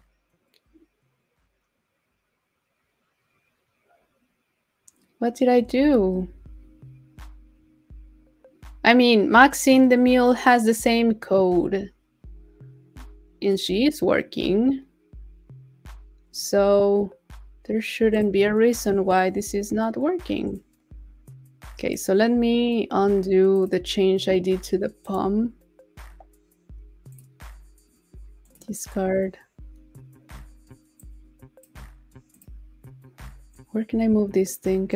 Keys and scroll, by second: 5.8 super+w.